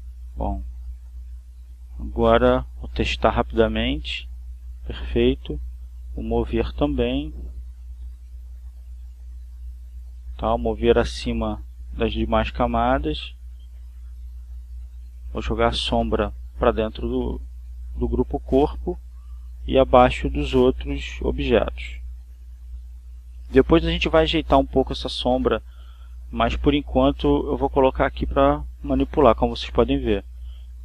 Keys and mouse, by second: 0.5 click, 1.4 click, 2.3 click, 3.3 click, 4.9 ctrl+z, 6.5 click, 8.5 click, 11.5 click, 12.8 ctrl+z, 14.1 click, 15.1 click, 17.1-18.5 drag, 19.0 click, 20.4-22.4 drag, 22.5 click, 24.4 click, 24.9 click, 25.6-26.6 drag, 26.9-28.8 drag, 29.1-30.4 drag.